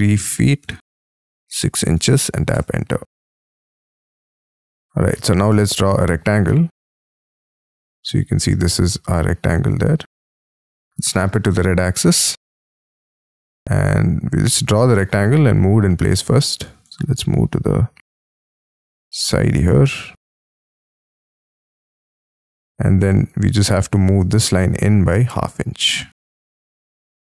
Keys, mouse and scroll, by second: 0.6 ', 1.1 6, 1.7 shift+', 2.5 Return, 3.1-3.7 scroll down 6, 3.7-4.2 scroll up 5, 4.5 middle click, 4.7-5.1 scroll down 3, 5.1 middle click, 5.9 shift+scroll down 2, 6.4 middle click, 8.8-9.2 scroll up 4, 9.2 scroll down 4, 11.2 right click, 14.9 space, 15.4 double click, 15.8-16.8 scroll up 3, 17.2-18.3 shift+scroll up 5, 18.3-18.8 shift+scroll up 1, 19.4 shift+click, 21.9 shift+click, 22.3 space, 23.6 m, 24.1 ctrl+click, 25.2-27.2 typing, 26.8 Return.